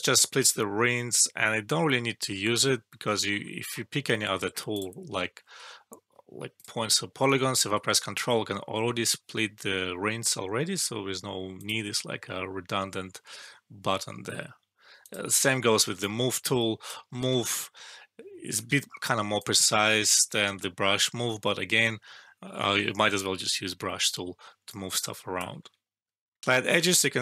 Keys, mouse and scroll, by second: 2.5-2.9 scroll up 1, 4.6 click, 6.4 click, 10.0 scroll down 1, 11.5 click, 17.1 ctrl+z, 17.5-18.7 click, 18.6 ctrl+z, 19.3-20.3 click, 20.4 ctrl+z, 24.6-25.6 click, 25.6 ctrl+z, 26.4 alt+F12.